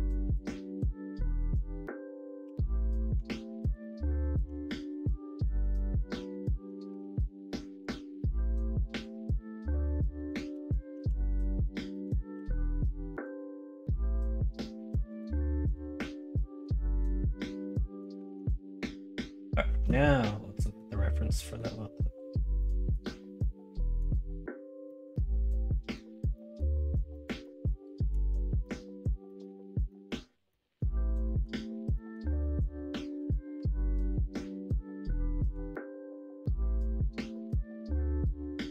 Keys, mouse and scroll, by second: 2.4 e, 3.2 alt+z, 3.8 middle click, 4.4 l, 4.8 middle click, 7.0 alt+z, 8.1 middle click, 10.1 middle click, 10.4 ctrl+z, 11.2 ctrl+z, 11.3 middle click, 11.9 middle click, 12.3 e, 13.3 middle click, 15.7 middle click, 17.6 middle click, 18.2 alt+z.